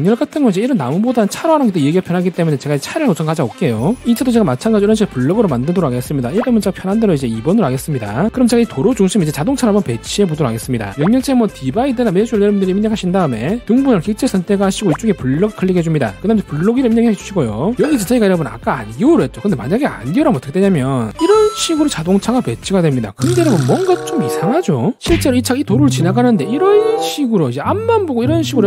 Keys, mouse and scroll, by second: 1.1 right click, 1.5 click, 2.1 click, 2.5 right click, 7.4 click, 7.8 2, 11.8 d, 14.6 click, 15.8 click, 17.0 2, 17.2 click.